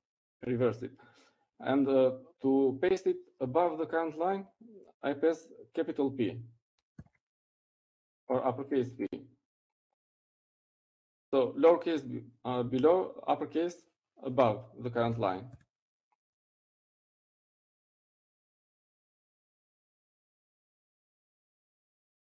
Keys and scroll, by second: 9.8 shift+p, 18.8 u.